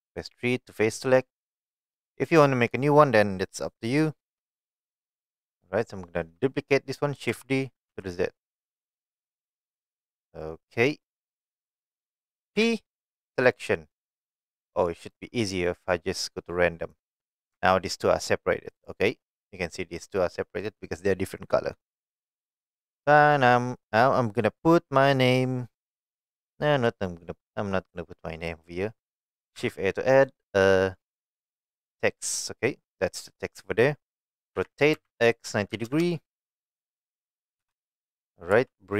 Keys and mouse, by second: 1.5 click, 5.1 middle click, 7.3 shift+d, 7.9 z, 10.1 click, 10.4-11.8 middle drag, 12.6 p, 15.2-17.1 drag, 17.6 Tab, 18.8 click, 19.3-20.0 middle drag, 21.9 middle click, 27.1-28.0 middle drag, 32.4 shift+a, 34.6 r, 34.9 x, 35.7 KP_9, 35.9 KP_0, 36.8 click, 37.8 KP_3, 38.5 g.